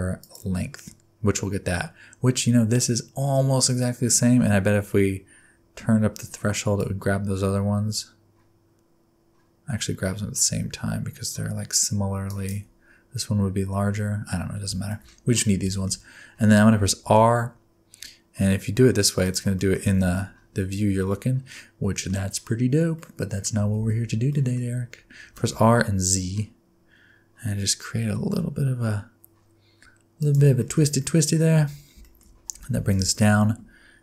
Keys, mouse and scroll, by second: 1.7-2.2 scroll up 3, 2.6-3.1 scroll up 2, 6.8 click, 12.9 scroll down 1, 14.3-14.7 scroll down 3, 14.9 shift+middle click, 15.1-15.6 scroll down 1, 15.6-17.0 scroll down 3, 15.7 shift+middle click, 17.0 r, 19.6 middle click, 19.9 alt+z, 20.1 middle click, 22.9 middle click, 23.8 ctrl+z, 24.3 middle click, 24.6-25.3 scroll up 2, 25.3 r, 30.6 shift+middle click, 31.6 Tab, 32.0 shift+middle click, 32.5 g.